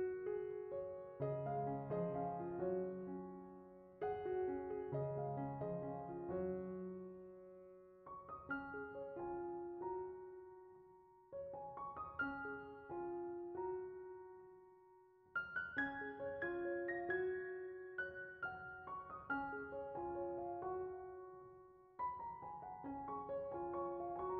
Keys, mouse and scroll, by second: 0.0 b, 3.4 middle click, 5.3 click, 5.6 middle click, 6.7 middle click, 7.2 click, 10.7-14.3 drag, 14.5 click, 15.0 middle click, 15.2 click.